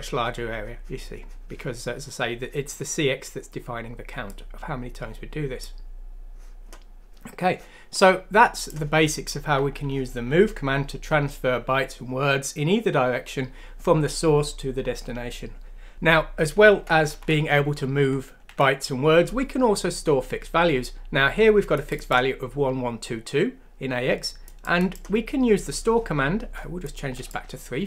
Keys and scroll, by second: 10.1 ;, 15.9 ctrl+z, 17.2 BackSpace, 18.0 BackSpace, 18.5 Delete.